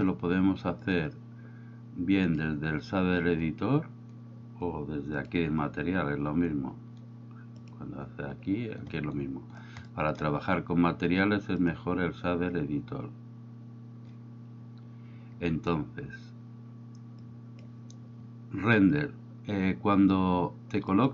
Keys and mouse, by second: 1.0-2.5 drag, 7.7 click, 10.0 middle click, 11.7-14.7 drag, 17.3 click.